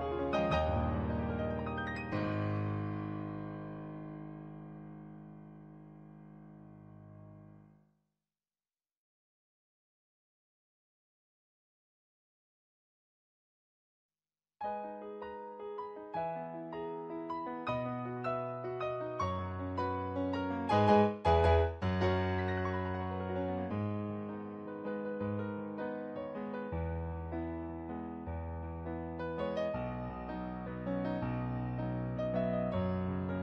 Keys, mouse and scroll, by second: 0.4 ctrl+z, 5.8 ctrl+z, 6.6 ctrl+z, 8.3 ctrl+z, 9.0 ctrl+z, 9.2 ctrl+z, 10.4 ctrl+z, 10.6 ctrl+z, 11.3 ctrl+z, 11.8 ctrl+z, 12.4 ctrl+z, 14.0 ctrl+z, 14.6 ctrl+z, 16.0 ctrl+z, 17.7 ctrl+z, 20.3 ctrl+z, 21.0 ctrl+z, 21.4 ctrl+z, 24.7 ctrl+z, 29.4 ctrl+z, 30.1 ctrl+z, 30.6 ctrl+z, 31.2 ctrl+z, 32.8 ctrl+z.